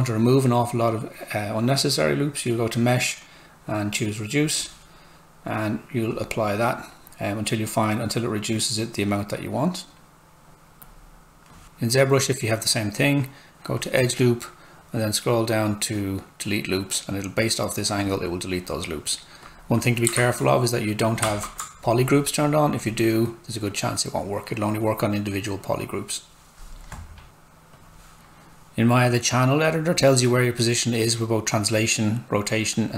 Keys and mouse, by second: 2.5 click, 15.3 click, 18.0 click, 20.2 z, 22.8 click, 27.9 click.